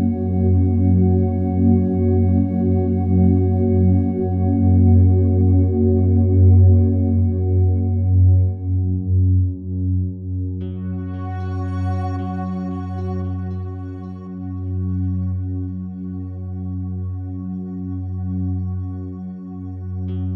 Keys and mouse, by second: 0.1 drag, 1.0 typing, 1.3 click, 2.2 shift+click, 2.3 shift+drag, 3.2 typing, 3.5 click, 4.3 shift+click, 4.5 shift+click, 5.4 typing, 5.7-6.7 drag, 7.6 typing, 7.8 click, 8.9 click, 9.6 click, 9.8 click, 10.9 click, 11.1 click, 11.7 click, 12.6-13.0 typing, 13.1 click, 13.8 click, 14.7 click, 14.9 drag, 15.5 click, 15.5-16.1 typing, 16.2 drag, 17.0 click, 18.1 typing, 18.4 click, 19.3 click, 19.5 click.